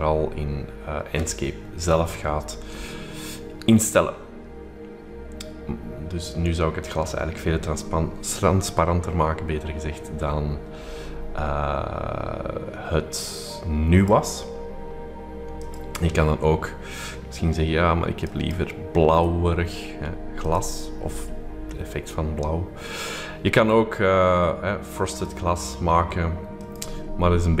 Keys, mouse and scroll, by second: 15.7 click, 18.2 click, 20.4 click, 21.6-22.3 scroll down 2, 25.1-26.1 drag, 26.6-27.6 drag.